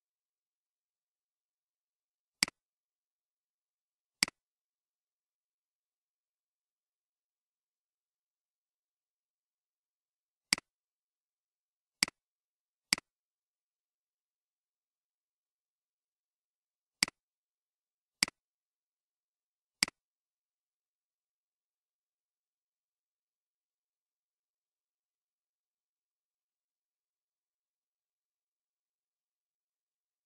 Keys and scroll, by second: 3.1 ctrl+c, 6.6 ctrl+v, 18.8 ctrl+c, 20.4 ctrl+v.